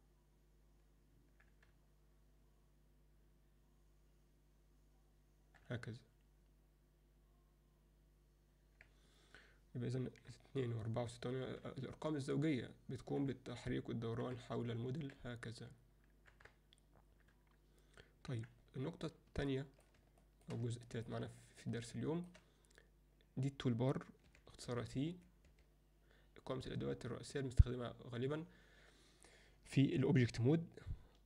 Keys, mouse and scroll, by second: 0.0-8.7 typing, 10.3-18.3 typing, 19.5-19.8 alt+middle drag, 20.2 alt+shift+middle click, 20.9 ctrl+alt+middle click, 21.4 alt+middle click, 22.0-22.3 shift+middle drag, 24.2 t, 24.6 t, 25.1 t, 25.5 t.